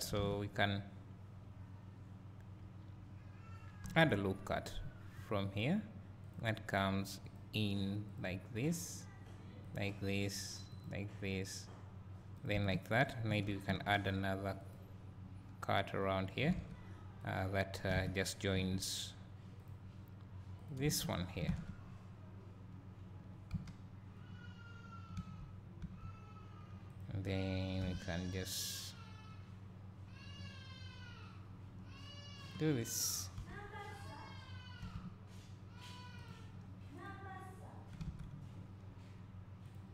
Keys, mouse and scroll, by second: 0.2 alt+a, 12.7 space, 14.6 ctrl+r, 16.6 alt+a, 17.3 click, 18.0 alt+a, 20.9 k, 21.0 space, 21.5 alt+a, 21.9 scroll down 1, 22.7 scroll up 1, 24.4-26.0 scroll up 3, 27.0 click, 27.9 g, 32.5 click, 33.4 o, 34.1 click, 34.9 g, 36.3-38.1 drag, 38.1 alt+a.